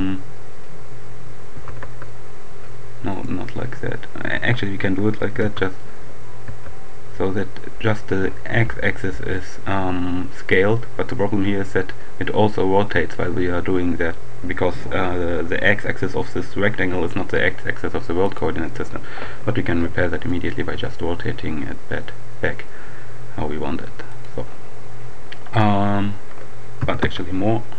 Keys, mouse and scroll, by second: 1.4 s, 1.8 x, 3.1 right click, 4.1 x, 5.1 s, 6.3 x, 18.0 click, 19.7 r, 20.1 click, 20.7 r, 24.1 click, 26.1 s, 27.1 x.